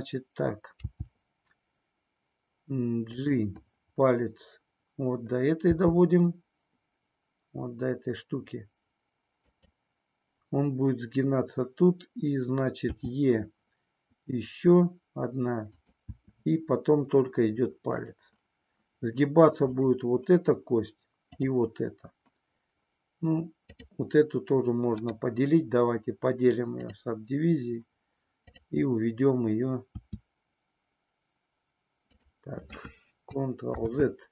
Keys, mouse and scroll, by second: 0.8 g, 3.1 click, 5.6 g, 9.5 click, 13.0 e, 15.7 click, 16.1 e, 18.0 click, 19.7 click, 23.6 click, 30.0 e, 32.2 click, 33.7 ctrl+z.